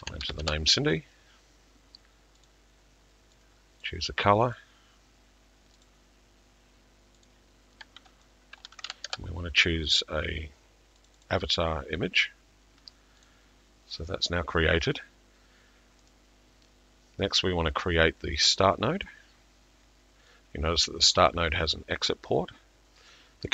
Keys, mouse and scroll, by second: 2.5 click, 2.5 typing, 3.9 click, 5.9 click, 7.3 click, 11.1 click, 11.1 typing, 13.3 click, 16.1 middle click, 19.1 middle click, 21.3 click.